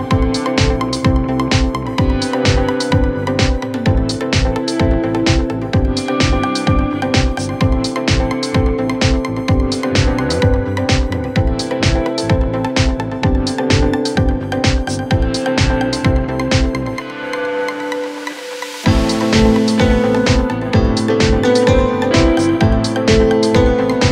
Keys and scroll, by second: 5.7 Escape, 13.0 c, 13.2 e, 13.6 Escape.